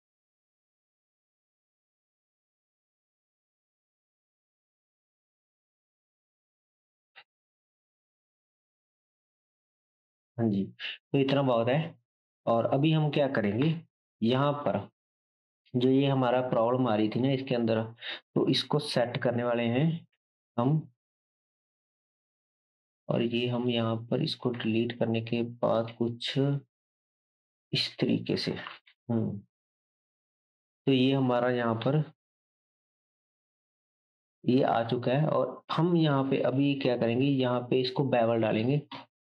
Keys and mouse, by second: 4.3 r, 7.1 KP_1, 11.3 KP_0, 13.6 KP_7, 15.2 click, 17.5 Tab, 18.9 ctrl+b, 22.6 Delete, 22.6-25.9 right drag, 22.6 shift+a, 24.6 s, 25.9 s, 28.7 KP_0, 30.2 middle click, 30.2 right click, 33.0 ctrl+KP_7, 33.2 ctrl+z, 34.9 Tab, 36.1 ctrl+b, 36.1-37.2 ctrl+middle drag, 36.1-37.2 ctrl+right drag.